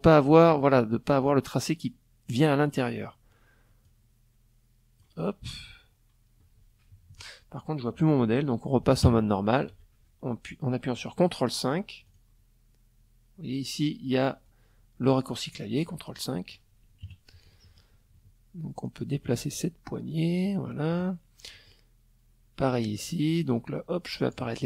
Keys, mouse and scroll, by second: 2.4-4.2 drag, 5.4 KP_Subtract, 7.6 ctrl+KP_5, 10.6 click, 14.4 click, 15.6 KP_Subtract, 16.0 click, 17.4-19.6 drag, 20.0 click, 21.2-23.0 drag, 23.1 click, 24.2 ctrl+a.